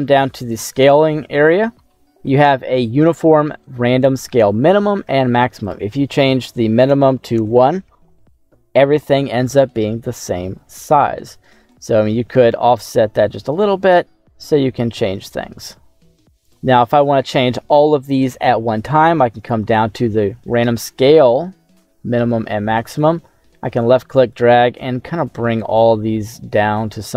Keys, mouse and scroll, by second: 0.1-0.5 scroll up 3, 0.5-1.9 middle drag, 5.6-7.3 drag, 11.6-13.6 drag, 19.1 middle click, 22.9-27.1 drag.